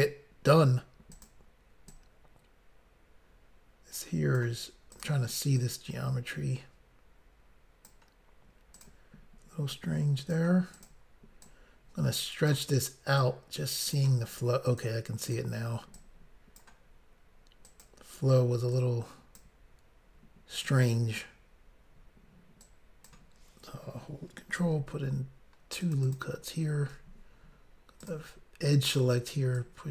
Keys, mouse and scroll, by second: 1.2 click, 1.9 click, 4.9 click, 5.0 click, 5.6 click, 8.7 click, 8.8 click, 9.7 click, 10.7 click, 10.8 click, 11.4 click, 13.2 click, 14.7 click, 14.8 click, 15.2 click, 15.4 click, 15.9 click, 17.7 click, 17.9 click, 18.8 click, 20.6 click, 20.7 click, 22.6 click, 24.6 ctrl+r, 25.2-25.8 scroll up 1, 25.8 click, 26.1 click, 28.0 click, 28.1 click, 28.9 click, 29.0 click, 29.6 click.